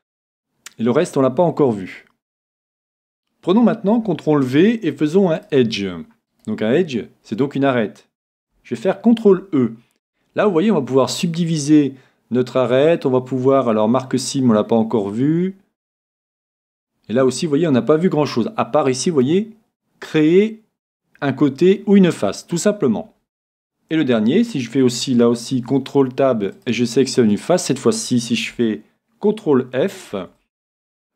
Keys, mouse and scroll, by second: 2.4-4.4 drag, 4.3 c, 6.3-8.2 right drag, 25.5 c, 27.3-29.2 right drag, 30.1 c.